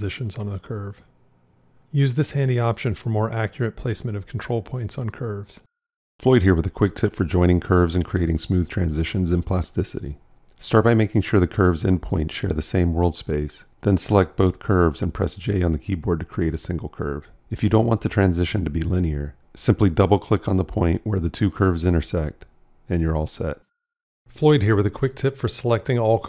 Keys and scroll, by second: 16.3 j.